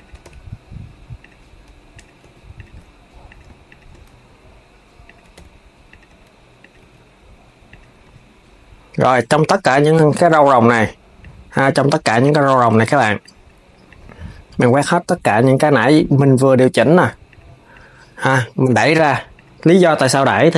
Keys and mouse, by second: 1.6 click, 1.9 g, 3.0 click, 3.4 shift+click, 3.8 s, 6.3 click, 8.7 click, 9.5 shift+click, 10.9 click, 12.9 shift+click, 13.6 shift+click, 15.5 shift+click, 17.0 shift+click, 17.4 shift+click, 17.8 shift+click, 18.4 shift+click, 19.0 shift+click, 19.5 shift+click, 20.2 shift+click.